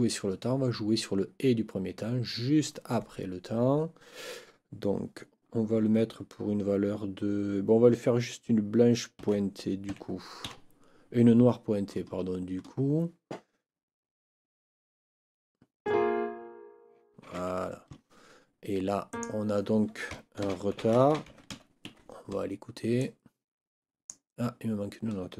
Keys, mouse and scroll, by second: 9.1 n, 9.9 5, 10.4 KP_Decimal, 17.3 Escape, 19.1 click, 20.4 ctrl+t, 20.7 ctrl+r, 20.8 ctrl+e, 21.0 ctrl+t, 21.1 ctrl+a, 21.3 ctrl+r, 21.5 ctrl+d, 21.9 ctrl+Escape, 22.9-24.3 drag.